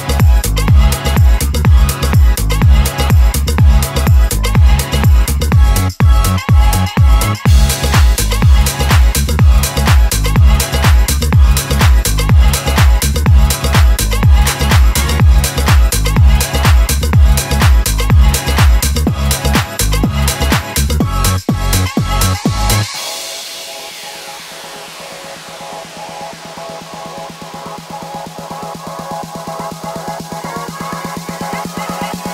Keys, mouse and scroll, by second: 2.0 click, 3.3-7.1 typing, 9.5 click, 11.7 click, 15.0 click, 17.6-18.3 scroll down 1, 18.3-19.8 middle drag, 21.3 click, 28.0 ctrl+c, 28.6 click, 30.6-32.3 typing.